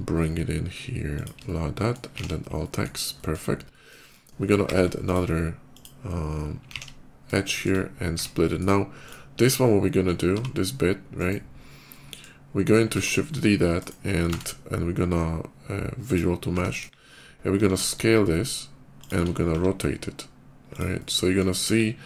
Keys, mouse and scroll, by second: 1.0 click, 1.3 shift+middle click, 2.0 alt+x, 2.5 middle click, 2.9 middle click, 3.5 middle click, 4.5 ctrl+r, 4.8 click, 5.6 click, 6.5 alt+x, 7.2 alt+shift+x, 7.2 shift+middle click, 7.8 Tab, 8.1 middle click, 8.9 click, 10.0 g, 11.0 right click, 11.4 scroll down 1, 11.6 middle click, 12.7 shift+d, 13.6 right click, 14.1 ctrl+a, 15.7 click, 16.6 KP_5, 17.4 s, 18.8 click, 19.4 r, 20.5 click, 20.7 middle click, 21.4 KP_5, 21.8 click.